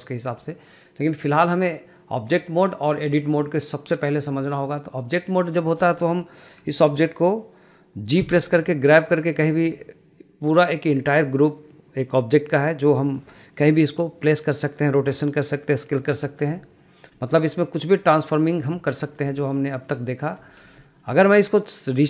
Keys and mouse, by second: 5.6 middle click, 6.0 shift+middle click, 6.9 shift+middle click, 8.3 g, 9.8 middle click, 11.8 middle click, 12.9 middle click, 16.8 shift+middle click, 18.8 shift+middle click, 19.5 shift+middle click, 19.8 shift+middle click, 20.1 shift+middle click, 20.9 shift+middle click.